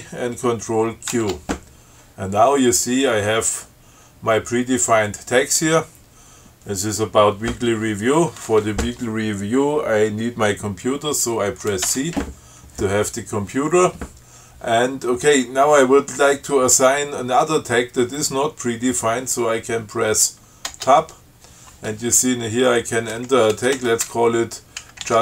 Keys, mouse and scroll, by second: 1.3 ctrl+q, 12.0 c, 20.8 Tab, 23.9-25.2 typing.